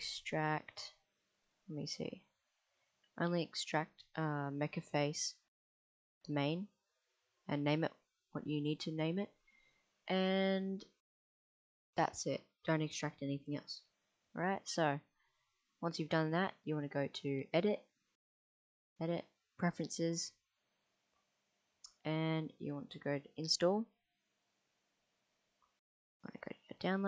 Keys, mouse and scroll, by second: 17.2 click, 18.5-19.6 drag.